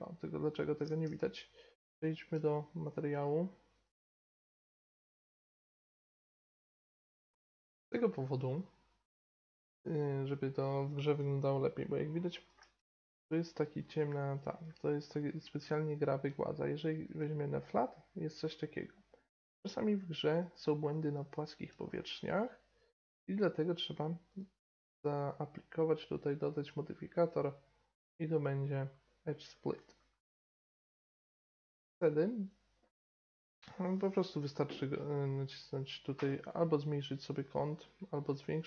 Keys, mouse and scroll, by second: 1.2 z, 3.7 click, 4.1 right drag, 4.4 right click, 4.5 click, 4.7 middle click, 4.7 Tab, 4.9 Tab, 4.9 right click, 4.9 a, 5.0 a, 5.3 Tab, 5.6 click, 5.8 middle click, 6.2 click, 6.4 middle click, 6.5 right click, 6.5 click, 6.5 middle drag, 6.9 right click, 7.1 drag, 7.2 middle click, 11.4-14.1 middle drag, 15.5-16.8 middle drag, 17.1-18.8 drag, 18.5-19.1 middle drag, 19.5-20.4 middle drag, 20.9-24.3 middle drag, 24.3-28.9 drag, 36.1-38.6 drag.